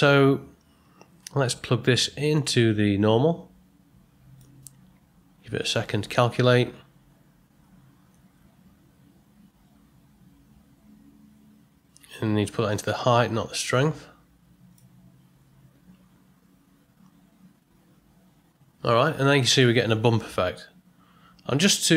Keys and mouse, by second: 2.3-4.4 drag, 12.8-14.7 drag.